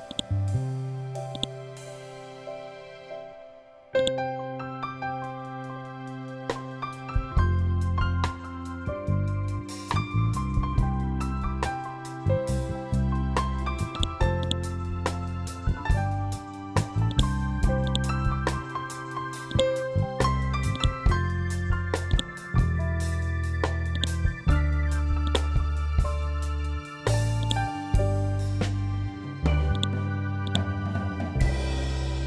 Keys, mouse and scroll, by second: 0.8 shift+right click, 5.2 F12, 6.0 Tab, 6.9 2, 7.1 Return, 8.4 F12, 9.3 Tab, 11.1 Return, 12.6 scroll down 1, 13.4 click, 15.1 scroll up 1, 16.6-24.7 drag, 25.1 scroll down 1, 26.9 click, 27.3-28.2 scroll down 1, 29.2 click, 31.2 scroll up 1.